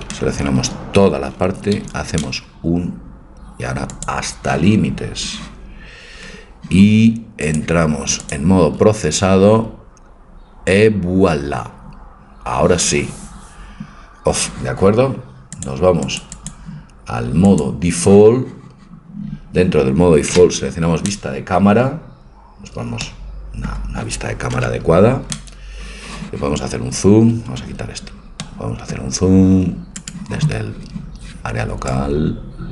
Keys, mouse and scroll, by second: 0.3 a, 0.6 a, 1.8 u, 4.0 u, 8.4 click, 15.6-19.5 drag, 20.3 middle click, 20.4 KP_0, 24.6 KP_0, 25.0-26.9 drag, 26.9 KP_0, 27.8 Tab, 30.1-32.0 right drag, 32.0-32.7 drag.